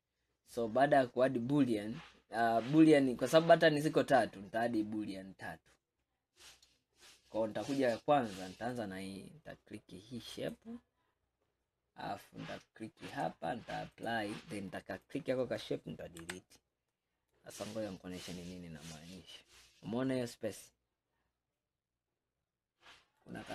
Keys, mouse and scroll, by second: 0.3-1.0 scroll up 2, 1.2-1.8 scroll down 1, 1.8-2.4 scroll down 1, 2.5-5.5 middle drag, 8.6 click, 13.2-15.2 drag, 16.3 Delete, 17.0-17.7 middle drag, 17.7-18.1 scroll up 5, 18.6-19.2 scroll down 2, 19.2-22.3 middle drag.